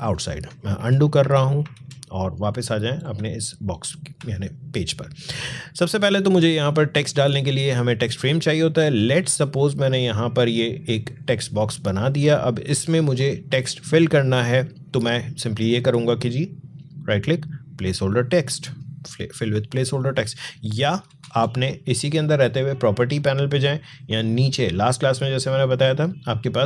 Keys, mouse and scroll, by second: 0.3 alt+scroll up 1, 0.6 ctrl+z, 2.4 alt+scroll up 1, 3.0 space, 3.2 click, 3.6 space, 7.4-14.3 drag, 16.6 right click, 18.0 click, 20.7 click, 20.9 ctrl+z, 22.4-26.6 drag.